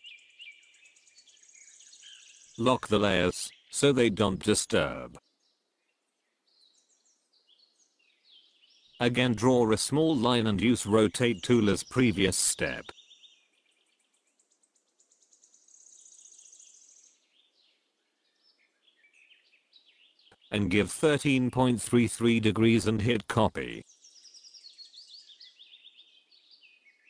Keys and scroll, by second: 0.8 ctrl+d, 25.5 KP_1, 26.2 KP_3, 26.2 KP_Decimal, 26.9 n.